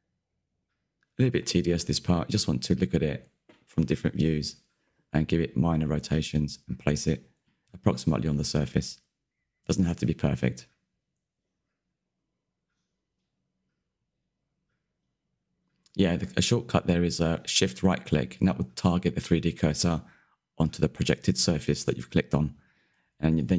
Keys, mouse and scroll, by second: 0.5-0.9 scroll up 13, 1.3 click, 3.0-3.7 middle drag, 3.7 click, 4.5 click, 6.1 click, 6.2-6.7 scroll down 10, 6.3 middle click, 6.7 middle click, 7.0 scroll up 2, 7.1 scroll down 1, 7.3 click, 7.6 alt+d, 8.0 click, 8.9 middle click, 9.4 KP_Decimal, 9.7-10.2 scroll up 1, 10.2 click, 10.5 click, 11.3 middle click, 12.3 click, 13.1-14.2 middle drag, 14.2 shift+click, 15.6 click, 16.0-17.0 middle drag, 17.0 click, 17.3 click, 18.1 scroll down 11, 18.2 middle click, 18.6 click, 18.9 middle click, 19.3 click, 19.5-19.9 scroll up 3, 20.8 click, 20.8 scroll down 6, 21.0 shift+middle click, 21.4 click, 21.6 click, 22.4 click, 22.5 middle click, 23.0 click, 23.2 KP_Decimal, 23.4 middle click.